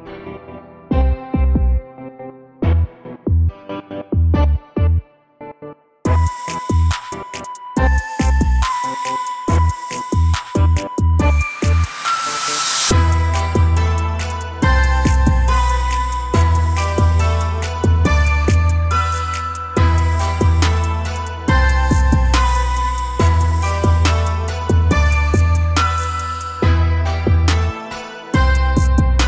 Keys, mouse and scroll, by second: 0.8 a, 2.6 a, 2.8 a, 4.1 l, 4.6 g, 5.8 a, 6.0 a, 6.1-6.6 scroll down 2, 6.6-7.6 middle drag, 7.6 Tab, 8.0 a, 8.1 a, 8.7-9.3 shift+middle drag, 9.3 shift+a, 13.3-17.2 middle drag, 17.2 ctrl+alt+KP_0, 18.0 shift+`, 22.5 r.